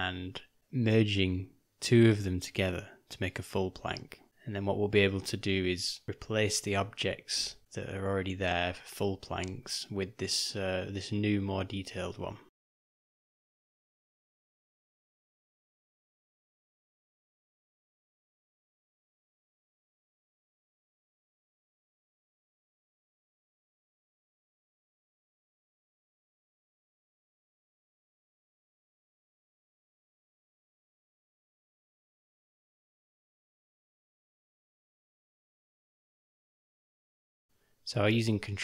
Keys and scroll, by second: 0.6 Tab, 1.1 Tab, 8.5 /, 9.0 /, 9.5 ., 15.1 shift+d, 19.7 r, 27.7 g, 35.7 ctrl+j, 38.4 v.